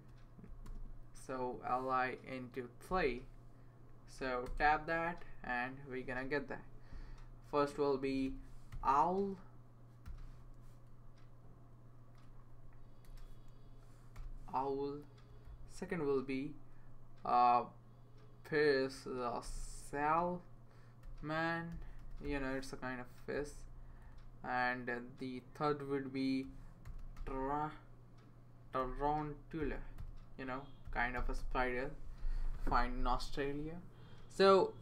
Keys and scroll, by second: 0.6 *, 2.9 3, 4.4 Tab, 8.3-8.7 typing, 10.0 i, 12.5 Left, 13.0 BackSpace, 14.1 w, 15.2 Down, 15.6 Left, 19.4-19.8 typing, 20.8-22.7 typing, 23.1 Down, 23.4 Left, 23.7 Left, 26.9 typing, 28.4-31.9 typing.